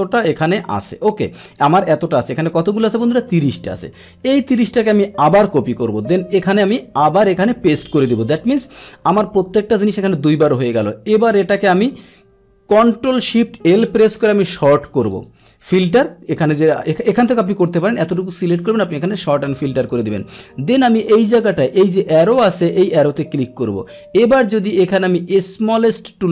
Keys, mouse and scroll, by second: 5.2 ctrl+c, 6.4 click, 7.5 ctrl+v, 10.6 click, 14.3 ctrl+shift+l, 15.1 click, 15.8 click, 17.1 click, 17.7 click, 19.1 click, 19.7 click, 22.1 click, 25.7 click.